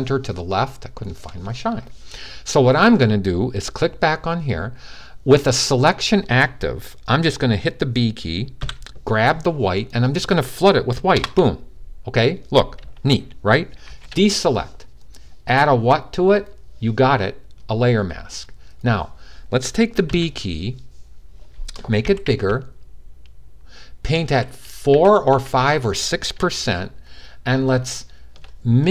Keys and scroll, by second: 8.3 b, 19.9 b, 21.5-25.1 typing.